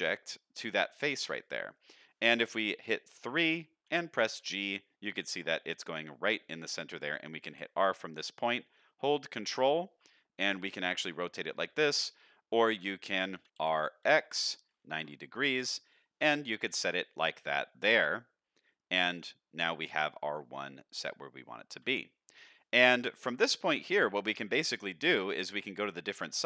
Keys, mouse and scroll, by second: 2.6 KP_3, 3.8 g, 6.4-6.9 scroll up 1, 7.5 r, 12.7 r, 15.5 r, 16.4 shift+middle drag, 17.0-17.5 middle drag, 19.3 shift+middle drag, 20.3-21.7 middle drag, 21.8 Tab, 22.9 Tab, 23.6-24.8 scroll down 2, 24.1-25.0 middle drag, 25.5-26.4 middle drag.